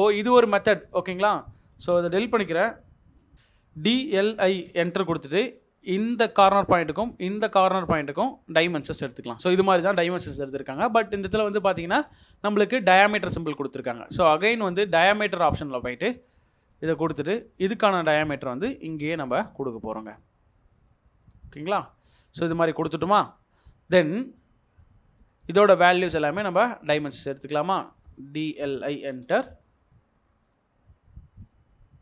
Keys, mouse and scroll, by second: 0.4 double click, 0.9 Delete, 2.3 typing, 4.1-4.8 typing, 10.1 middle click, 11.9-12.5 scroll up 1, 12.9 scroll down 1, 13.4 middle click, 22.0 Escape, 28.1-29.4 typing.